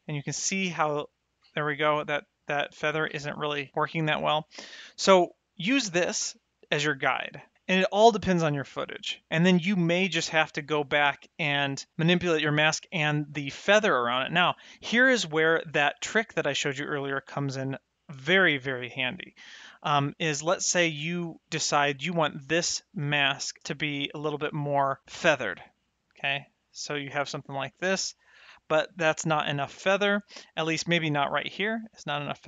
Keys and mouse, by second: 0.4 middle click, 5.2 click, 6.1 middle click, 7.4 click, 7.9 click, 9.3 middle click, 16.2 click, 18.8 middle click, 21.7 middle click, 23.2 middle click, 25.7 click, 27.2 click, 29.8 middle click, 31.5 click.